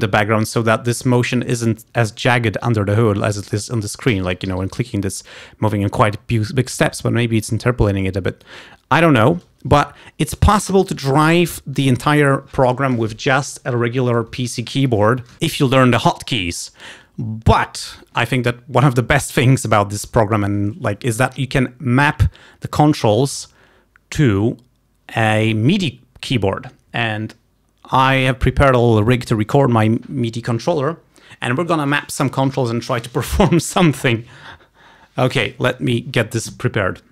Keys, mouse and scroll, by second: 2.5-4.2 drag, 4.2 g, 4.6 h, 6.6-8.7 drag.